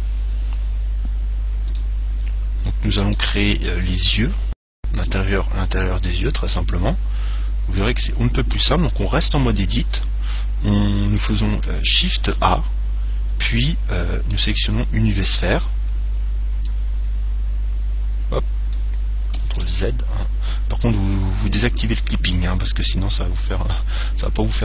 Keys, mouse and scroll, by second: 0.8-2.8 middle drag, 1.9 right click, 3.3-5.2 middle drag, 5.2-8.2 right drag, 7.6-9.9 middle drag, 12.3 shift+a, 15.8-18.0 middle drag, 16.9 click, 19.9 ctrl+z, 21.9-24.6 drag.